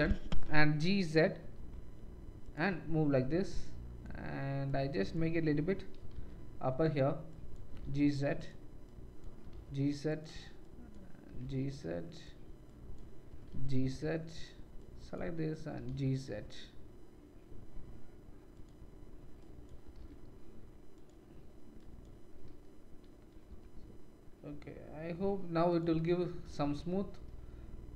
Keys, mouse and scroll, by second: 2.6 middle click, 3.6-6.9 drag, 5.9 g, 6.9 middle click, 7.4-8.4 drag, 7.6 g, 8.4 middle click, 9.0-10.2 drag, 9.4 g, 10.2 middle click, 10.6-12.2 drag, 11.2 g, 12.2-12.6 middle drag, 12.6-14.4 drag, 13.2 g, 14.4 middle click, 14.9-18.6 drag, 15.7 g, 18.6 middle click, 19.4-21.0 drag, 19.8 g, 21.0 middle click, 21.9-25.9 drag, 22.2 g, 25.9 Tab, 25.9-27.9 middle drag, 26.6 shift+z.